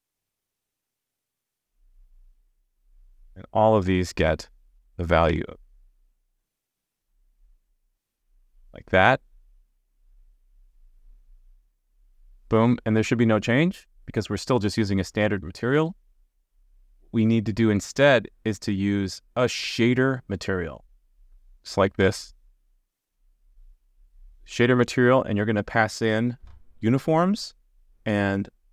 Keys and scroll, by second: 0.7 super+v, 11.7 super+s, 21.5 super+z.